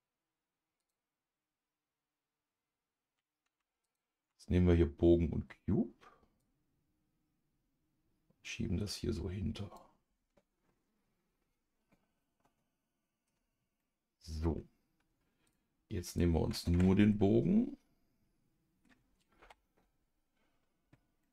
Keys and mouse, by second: 0.8 click, 3.8 shift+click, 6.4-9.8 drag, 12.2-13.2 middle drag, 13.8 middle click, 15.4 click, 16.1 click, 16.7 Tab, 17.1-18.8 middle drag, 19.4 KP_Divide, 21.2-21.3 middle drag.